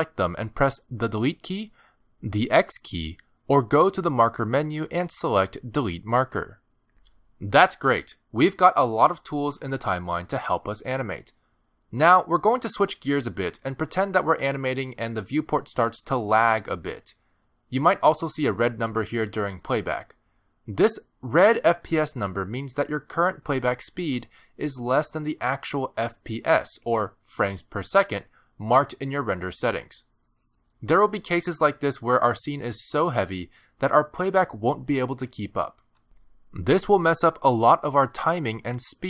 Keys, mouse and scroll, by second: 1.8 Delete, 3.3 click, 3.8 x, 5.0 click, 5.8 click, 26.6 click, 27.3 click.